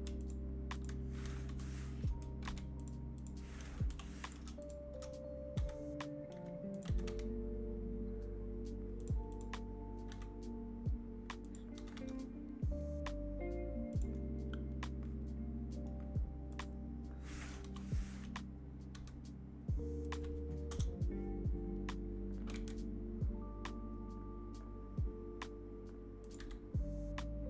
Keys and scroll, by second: 1.4 Delete, 2.5 ctrl+z, 3.8 Delete, 5.5 g, 6.8 g, 10.0 g, 17.6 KP_3, 18.9 r, 20.6 KP_0, 22.4 r, 26.3 g.